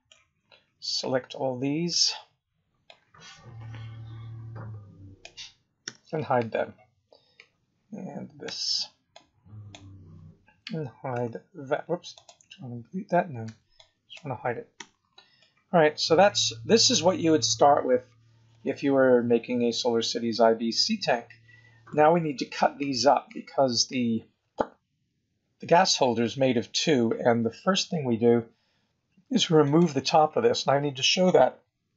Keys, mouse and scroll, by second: 0.3 scroll down 3, 1.9 b, 5.9 h, 6.5-7.1 scroll up 5, 7.4-8.4 scroll down 4, 8.4 b, 11.1 x, 12.1 click, 13.4 b, 14.7 h, 15.4 middle click, 17.4-17.8 scroll up 4, 18.5 middle click, 22.1-22.6 scroll down 3, 29.6 click.